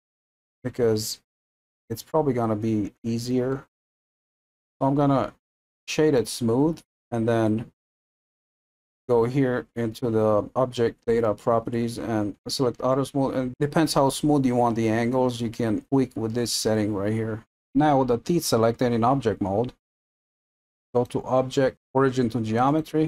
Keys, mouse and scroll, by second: 3.5-6.3 middle drag, 6.3-17.4 right drag.